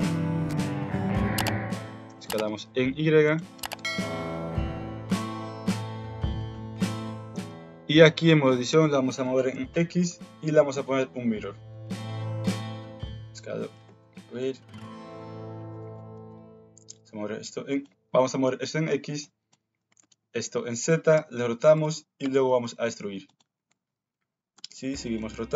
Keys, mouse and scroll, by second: 0.0 KP_Decimal, 0.6 alt+z, 1.9 s, 3.5 g, 5.2 s, 6.7 KP_1, 7.0 alt+z, 7.3 Tab, 8.7 g, 10.1 Tab, 10.8 ctrl+w, 11.4 alt+z, 11.7 Tab, 12.5 alt+z, 12.7 s, 13.8 ctrl+z, 15.7 click, 16.0 g, 19.3 click, 19.8 g, 21.1 r, 22.2 e, 23.5 alt+z, 24.5 r, 25.2 g.